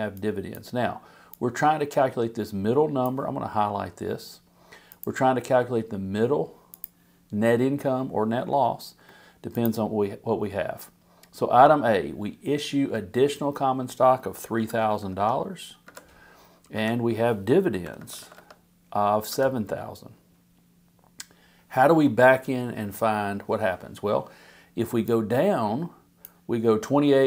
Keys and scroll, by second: 14.3-15.3 typing, 15.8 Home, 16.7 Down, 17.7 7, 18.0 0, 19.3 Return.